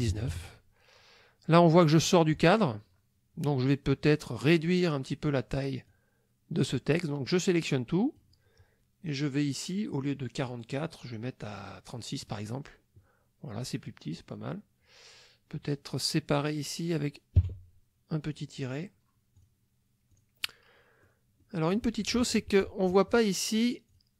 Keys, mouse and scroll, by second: 0.1 KP_1, 0.3 KP_9, 5.9-8.4 drag, 10.5 click, 12.3 click, 16.4 click, 17.4 KP_Subtract, 19.4 click, 20.1 click, 20.5 click, 21.4 click, 23.9 click.